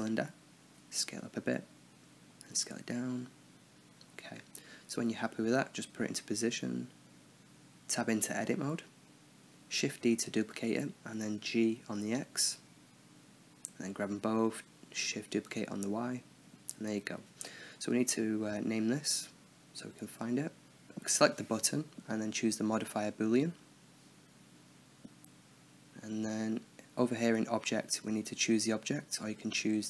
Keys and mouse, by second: 1.7 s, 2.8 s, 3.9 KP_7, 6.1 g, 9.1 Tab, 9.8-11.7 drag, 11.1 KP_7, 11.7 shift+d, 13.8 a, 14.0 a, 14.4 shift+d, 15.8 Tab, 16.3 drag, 17.4 n, 17.8 click, 18.3 t, 19.2 n, 20.3-21.2 drag, 21.2-23.3 middle drag, 24.7-29.1 drag, 29.7-29.8 drag.